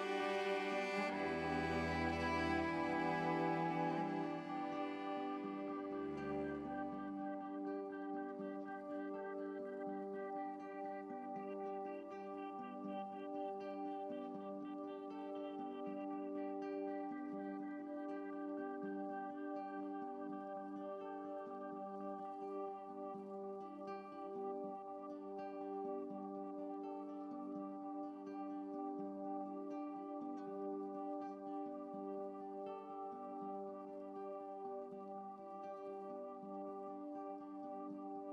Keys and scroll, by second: 7.3 ctrl+z, 8.2 ctrl+shift+z, 10.3 x, 13.9 ctrl+i, 14.8 ctrl+z, 16.0 ctrl+i, 16.2 ctrl+i, 17.8 x, 23.6 ctrl+i, 24.6 ctrl+z, 31.4 x.